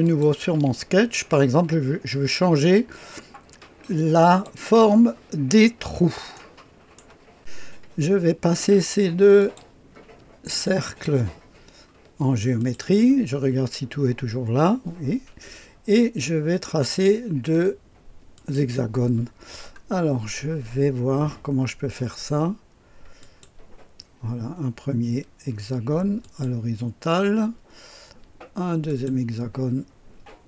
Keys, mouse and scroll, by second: 0.0 click, 0.4 space, 4.3-5.4 drag, 5.8-7.0 scroll up 1, 6.4 right click, 7.3 click, 7.9-9.3 scroll up 1, 9.3 click, 10.6 click, 12.5 click, 15.9 scroll down 2, 18.3 click, 19.1-19.4 scroll down 3, 20.3-23.1 scroll up 2, 23.1 click, 26.2 click, 28.9 click.